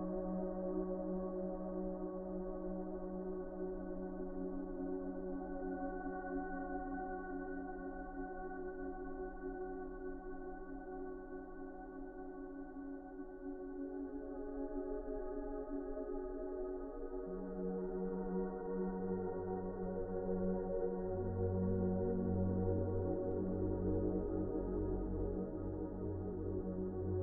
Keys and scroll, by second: 10.1 q, 13.0 ctrl+z, 17.2 q.